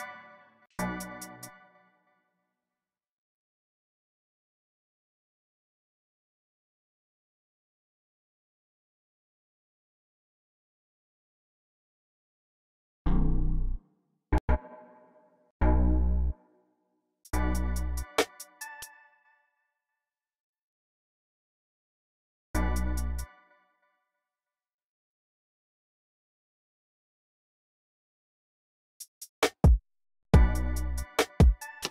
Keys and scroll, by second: 1.1 space, 1.5 alt+super+s, 1.8 y, 2.7 ctrl+super+r, 3.2 c, 5.3 y, 7.3 Right, 7.3 Down, 8.0 Right, 8.1 Down, 8.8 y, 10.0-15.4 typing, 17.0 typing, 18.6 space, 19.5 x, 22.0 x, 22.3 space, 22.9 space, 28.2-30.1 typing.